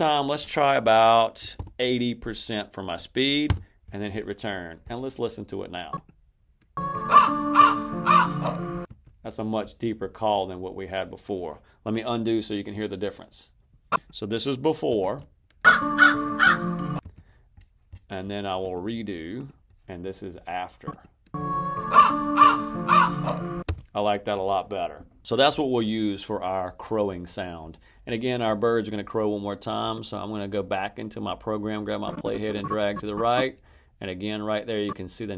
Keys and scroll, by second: 1.1-1.9 typing, 3.3 Return, 6.7 space, 8.7 space, 14.9 super+z, 15.5 space, 16.9 space, 21.2 space, 23.5 space.